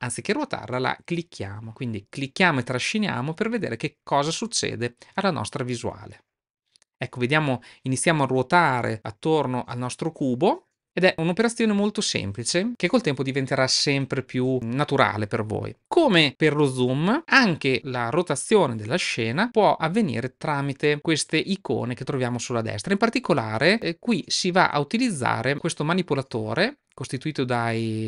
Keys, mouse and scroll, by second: 6.1-15.8 middle drag.